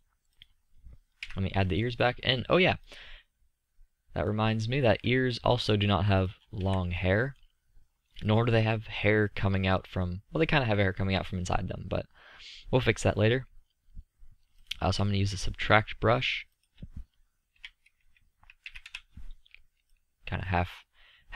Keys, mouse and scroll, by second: 1.4 KP_3, 4.7 middle click, 6.6 z.